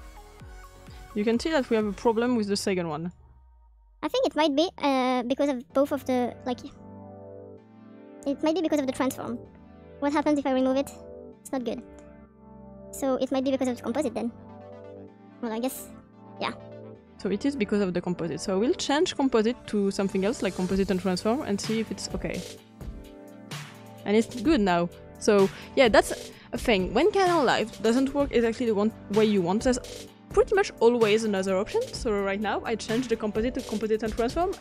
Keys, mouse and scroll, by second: 17.8-34.6 drag.